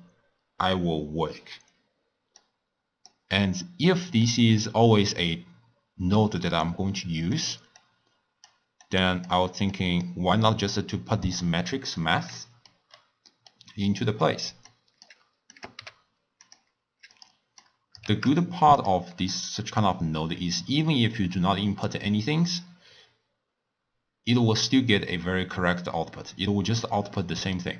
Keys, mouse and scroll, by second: 2.4-4.3 drag, 7.8 drag, 8.8 click, 9.7-11.6 drag, 11.6-12.4 scroll down 4, 12.4 middle click, 12.8-13.3 scroll down 5, 13.3-14.0 middle drag, 14.0 click, 14.0 scroll up 1, 14.6 click, 15.5 click, 15.8 g, 17.1 click, 17.6-18.3 drag, 18.3 shift+d, 26.6 scroll down 4, 27.2-27.7 middle drag.